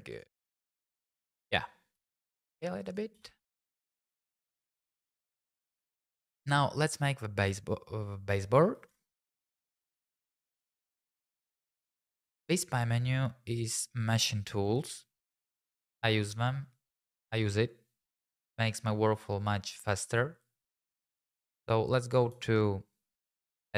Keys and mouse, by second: 0.1 click, 1.9 s, 2.8 click, 3.1 g, 3.4 y, 3.8 click, 8.9 Tab, 9.4 click, 9.9 middle click, 10.3 middle click, 10.9 middle click, 11.1 Tab, 11.7 Tab, 22.3 Tab.